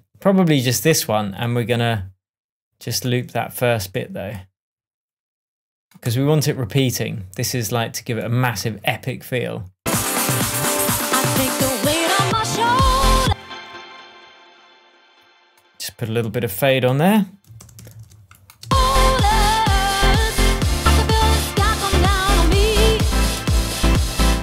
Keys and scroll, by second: 6.0 BackSpace, 13.2 space, 17.5 super+d, 18.6 super+space, 19.1 space, 20.6 super+d.